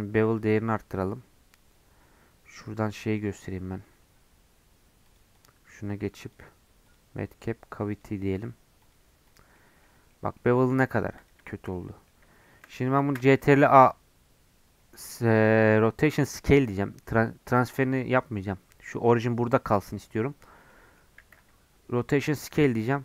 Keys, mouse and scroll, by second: 0.3-9.5 drag, 9.5 middle click, 9.8 scroll down 1, 10.0-11.1 middle drag, 11.1 click, 11.4-13.0 shift+middle drag, 13.0 ctrl+a, 20.6 middle click, 21.1 ctrl+a, 22.5-23.0 middle drag.